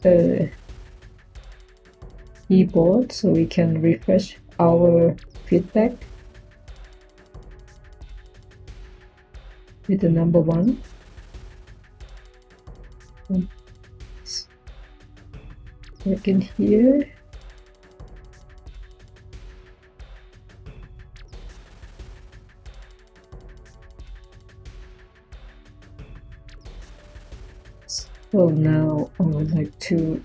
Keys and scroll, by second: 1.6 k, 17.7 typing, 24.3-25.1 typing.